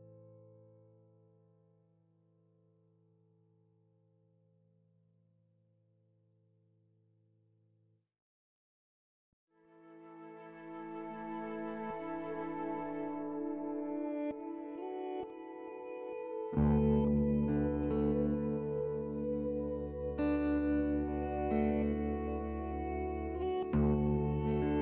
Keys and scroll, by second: 0.0-0.4 typing, 0.8 F3, 5.5 c, 10.1-11.2 typing, 16.6 p, 18.1 c, 18.6 t, 19.0 z, 22.2 w.